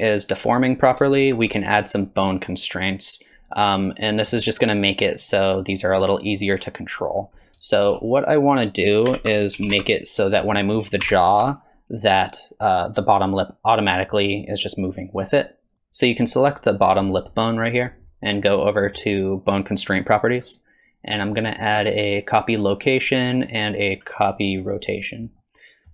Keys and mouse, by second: 1.1 shift+middle drag, 3.7-4.3 middle drag, 7.4-7.9 shift+middle drag, 8.4 click, 9.1 a, 9.6 alt+g, 9.7 alt+r, 10.2 click, 11.1 r, 20.0 click, 21.0-22.4 drag, 23.1-24.3 drag, 25.4 middle click.